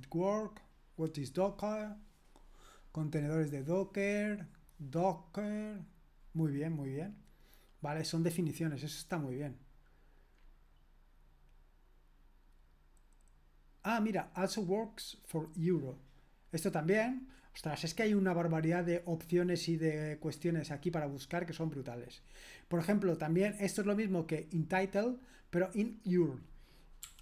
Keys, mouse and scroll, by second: 17.0-19.0 drag, 19.0-20.3 scroll down 1, 20.3-22.6 scroll down 1, 22.6-25.7 scroll down 1, 26.2 click, 26.8-27.2 typing.